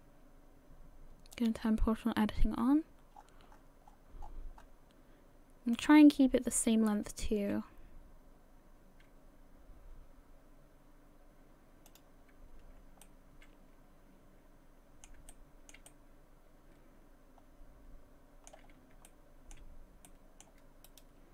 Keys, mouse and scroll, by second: 1.3 click, 2.4 g, 6.5 right click, 7.0 g, 13.0 middle click, 15.3 shift+middle click, 15.9 middle click, 18.7 scroll up 2, 19.1 shift+middle click, 20.1 middle click, 20.9 right click.